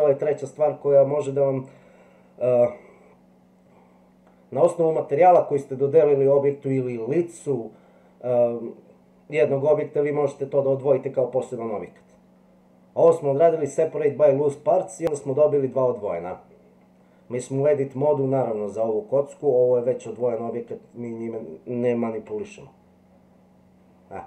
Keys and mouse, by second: 22.3 g.